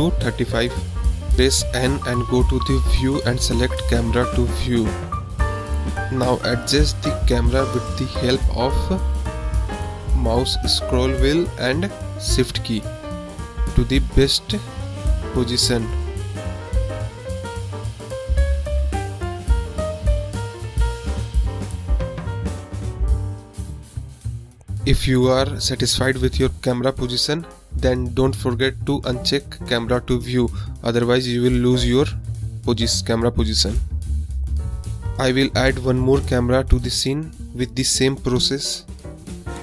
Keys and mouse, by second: 0.3 n, 1.5 click, 2.3 n, 6.4 click, 7.6-7.9 shift+drag, 8.3 click, 9.3-10.0 shift+drag, 10.9 click, 11.6 click, 12.7 click, 14.2 click, 14.9 click, 15.6 click, 16.7 click, 17.3 click, 20.7 click, 21.5 click, 22.8 shift+click, 23.5 shift+middle click, 24.3 middle click, 24.9 shift+middle click, 26.0 middle click, 26.9 shift+middle click, 27.8 click, 28.6 click, 29.4 click, 30.9 n, 31.3 click, 31.5 n, 32.9-37.2 middle drag, 38.0 middle click, 39.4 shift+a.